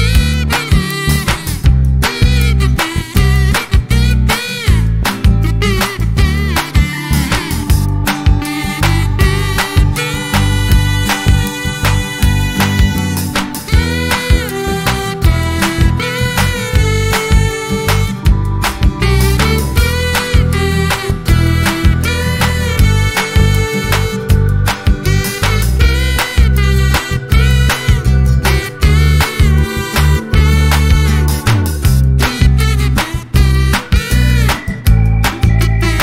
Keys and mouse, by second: 0.7 click, 1.4-7.0 drag, 2.8 ctrl+space, 5.3 ctrl+space, 7.4 click, 8.1 space, 9.4 click, 11.5 ctrl+shift+f, 16.3 click, 19.7 F12, 25.3 click, 27.4 click, 29.3 click, 30.3 click, 31.2 click, 32.8 click, 33.2 middle click, 33.9 ctrl+z, 34.7 click, 35.6 ctrl+z.